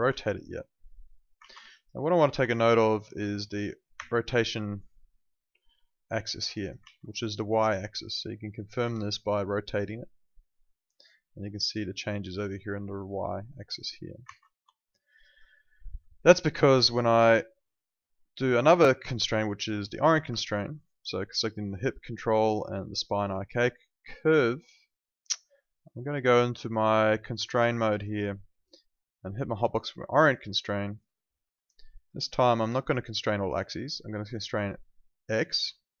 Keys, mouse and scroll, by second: 0.0 ctrl+z, 0.8 click, 1.3 ctrl+z, 1.7 alt+click, 1.9 alt+right click, 2.4 w, 2.9 alt+click, 3.9 e, 4.9 click, 8.1 click, 8.8 ctrl+z, 9.5 click, 14.2 ctrl+z, 14.7 alt+click, 15.5 alt+middle click, 15.7 alt+right click, 21.5 click, 22.9 ctrl+click, 27.3 click.